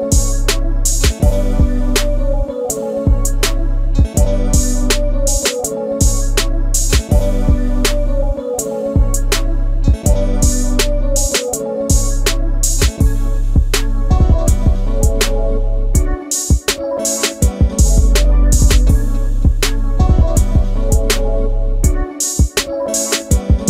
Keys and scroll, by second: 7.6 space, 10.7 shift+l, 12.5 space, 13.6 g, 22.1 m.